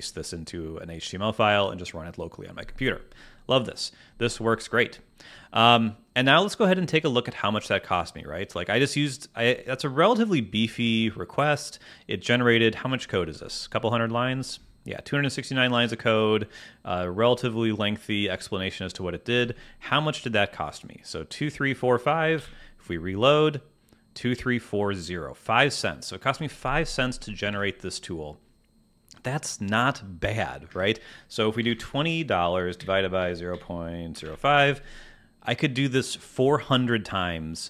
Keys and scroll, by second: 19.3 super+Tab, 22.3 super+r, 27.4 super+Tab, 30.6 alt+space, 32.7 /, 33.2 0.